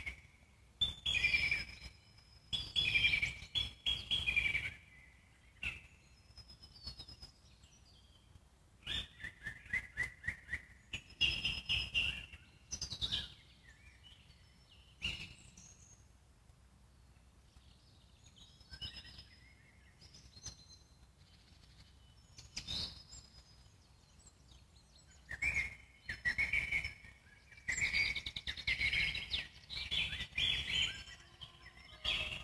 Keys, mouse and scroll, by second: 1.0-1.3 scroll down 2, 1.3-3.4 alt+middle drag, 5.1-5.4 scroll up 2, 5.4 Tab, 6.0 click, 6.4-7.8 alt+middle drag, 7.8-8.6 scroll up 3, 8.6 click, 9.1 alt+middle click, 9.4 click, 9.8 click, 10.6 g, 11.6 click, 11.8 z, 12.2 click, 12.4 click, 13.0 z, 16.0 click, 16.6 click, 17.3 g, 19.0 scroll down 1, 19.2 click, 19.5-21.0 alt+middle drag, 21.0-21.3 scroll down 1, 21.3-22.6 alt+middle drag, 22.6 click, 23.0-23.3 scroll up 1, 23.3-24.7 alt+middle drag, 24.7 Tab, 25.1 click, 25.5 click, 25.7 alt+middle click, 26.1 scroll up 2, 27.0 g, 27.8 click, 28.2-30.4 alt+middle drag, 30.4 g, 31.7 ctrl+z, 32.1 click.